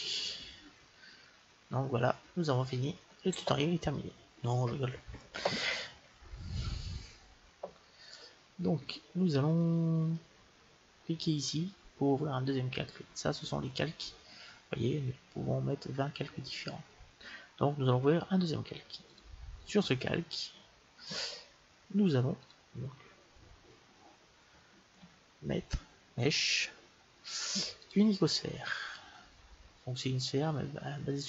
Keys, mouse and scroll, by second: 0.4-2.4 middle drag, 5.5-7.4 middle drag, 19.0-21.0 drag, 22.4-24.3 drag, 24.8 shift+a, 28.4-31.2 middle drag.